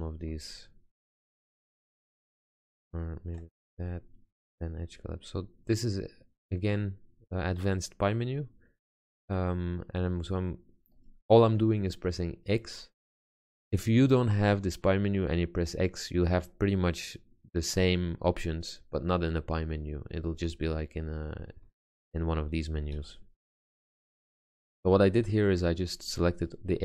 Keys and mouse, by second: 4.8 x, 22.0 shift+a, 25.0 ctrl+z.